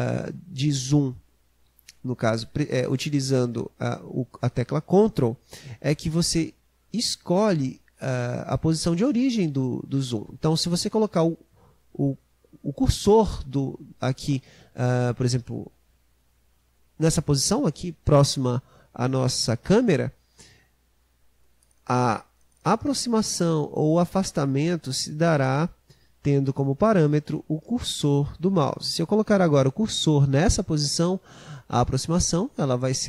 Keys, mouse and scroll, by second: 21.1-24.1 ctrl+middle drag, 31.0-33.0 ctrl+middle drag.